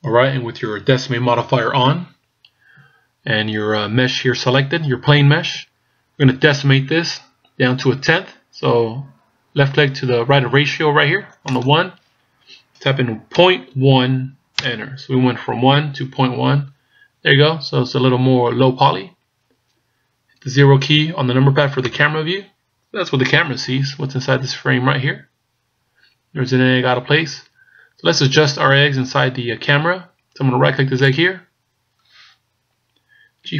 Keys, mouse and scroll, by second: 11.5 click, 21.8 KP_0, 24.5-25.0 scroll up 2, 31.1 right click.